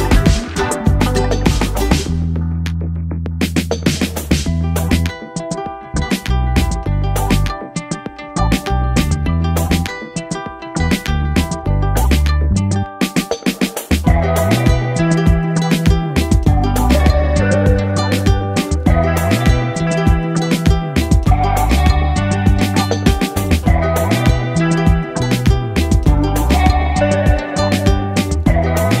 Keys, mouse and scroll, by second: 9.9 click, 12.6 click, 13.7 click, 20.7 click, 22.0 click, 23.5-29.0 drag.